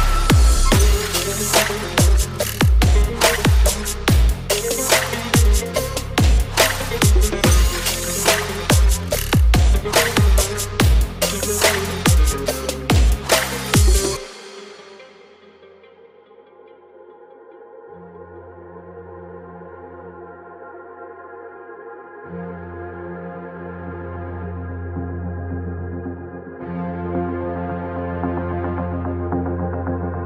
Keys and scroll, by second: 9.9 Delete, 30.1 ctrl+j.